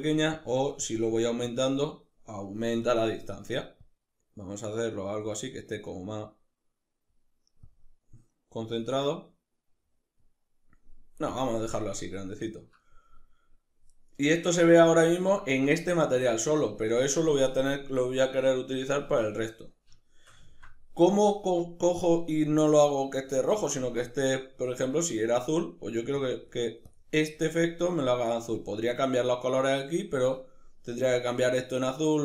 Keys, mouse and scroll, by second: 0.0-10.3 drag, 10.9 drag, 11.6-25.9 middle drag, 25.9 click, 26.5 click, 28.1 click.